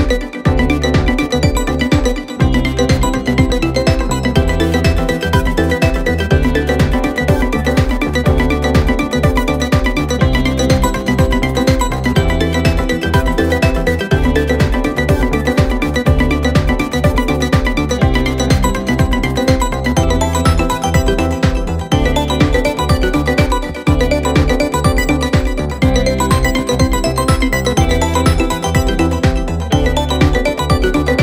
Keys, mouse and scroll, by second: 0.0 click, 1.1-3.7 drag, 3.7-4.4 scroll down 2, 4.4 click, 5.1 BackSpace, 5.2 BackSpace, 7.4 middle click, 8.0-9.5 drag, 9.5 scroll down 2, 9.6 scroll up 1, 9.8 middle click, 10.6 shift+a, 12.6 g, 13.8 middle click, 14.5 click, 14.7-15.7 middle drag, 15.7 scroll down 1, 15.9 scroll up 2, 16.0-16.6 scroll down 1, 16.6 click, 17.0 click, 18.6-20.0 drag, 21.7 middle drag, 22.0 click, 22.3 s, 25.3 g, 29.7 click, 31.1 click.